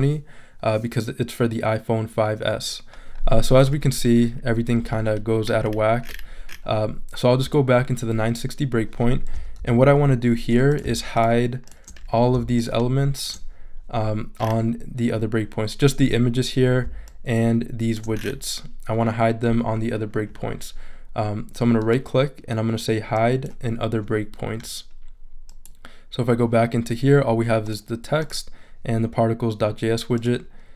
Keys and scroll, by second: 9.6 super+-.